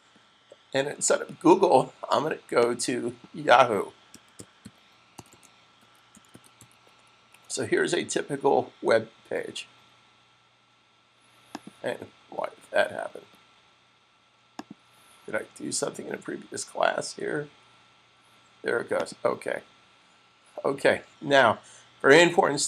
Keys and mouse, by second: 3.0 click, 3.9 click, 3.9-6.9 typing, 11.4 click, 14.5 click, 18.9 click.